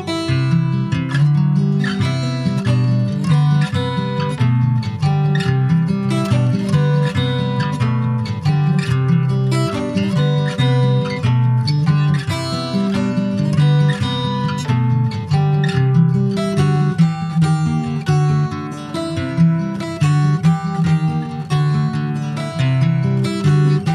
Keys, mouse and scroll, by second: 0.1 middle click, 0.7 ctrl+s, 1.0 middle click, 1.5 ctrl+s, 1.6 click, 1.9 alt+middle click, 2.8 alt+middle click, 3.1 alt+click, 3.8 shift+a, 5.1 alt+middle click, 5.5 shift+middle click, 5.9-7.5 scroll up 4, 6.3 shift+middle click, 7.5 click, 10.8 scroll down 2, 10.9 shift+middle click, 11.5-12.1 scroll down 6, 12.1 click, 12.8-13.8 scroll up 4, 13.8 click, 16.0 click, 16.3 scroll up 4, 16.5 shift+middle click, 17.1 click, 17.3-18.3 scroll up 3, 18.3 click, 21.9 alt+middle click, 22.9 Tab, 23.3 Tab, 23.7 s.